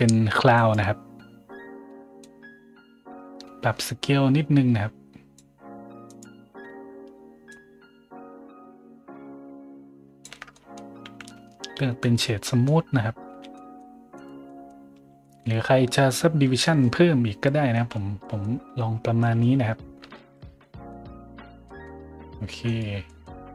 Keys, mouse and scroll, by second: 0.5 click, 1.4 scroll up 1, 2.2-5.3 drag, 6.0 click, 7.4-10.2 shift+drag, 10.5 middle drag, 11.9 click, 12.4 middle drag, 13.2 a, 13.5 middle drag, 14.1 right click, 14.4 middle drag, 14.9 a, 15.2 middle drag, 16.5 middle drag, 17.4 scroll down 2, 17.7 middle drag, 18.1 middle drag, 19.1 middle drag, 20.1 shift+z, 20.5 middle drag, 21.6 middle click, 22.6 right click, 23.0 middle click.